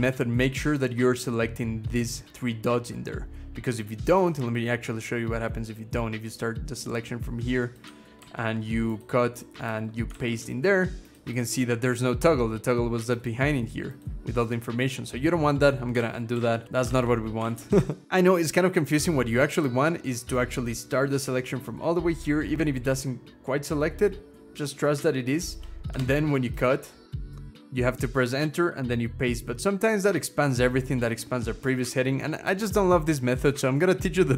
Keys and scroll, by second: 8.0 ctrl+x, 9.5 Return, 9.9 ctrl+v, 15.8 ctrl+z, 16.1 ctrl+z, 16.4 ctrl+z, 16.6 ctrl+z, 17.2 ctrl+z, 25.8 ctrl+x, 27.4 Return, 28.6 ctrl+v.